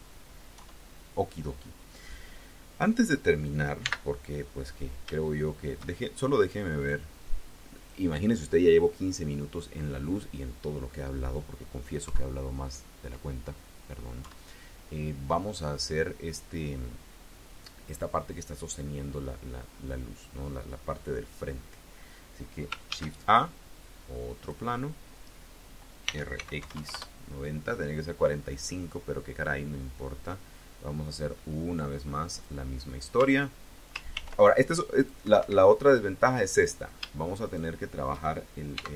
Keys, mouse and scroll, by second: 0.4 KP_1, 2.8 scroll up 2, 3.7 n, 4.4-4.7 scroll up 2, 5.2 shift+click, 6.6 click, 7.6 click, 11.9 KP_3, 14.0 KP_1, 22.8 shift+a, 24.2 click, 25.9 r, 26.2 x, 26.4 KP_9, 26.6 KP_0, 26.8 KP_Enter, 29.6-32.5 drag, 33.0 Tab, 34.0 ctrl+r, 34.8 click, 35.1 Escape, 36.4 click, 37.3 shift+click, 38.6 x.